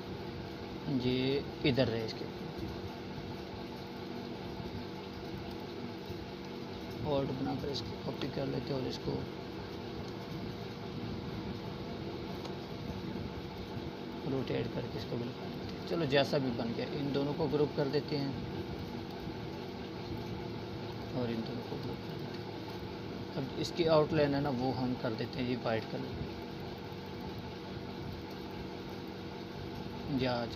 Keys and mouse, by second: 1.5-2.7 alt+drag, 4.8-7.0 shift+drag, 12.4 right click, 13.2 click, 15.4 right click, 16.3 click, 20.8-30.5 drag.